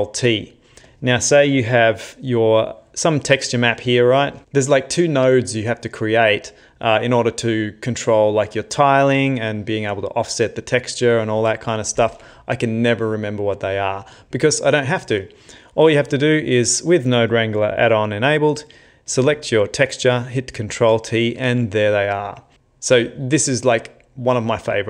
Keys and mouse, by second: 0.9 click, 1.7 x, 2.7 click, 4.0 shift+middle click, 16.1 click, 16.7 click, 20.6 ctrl+t.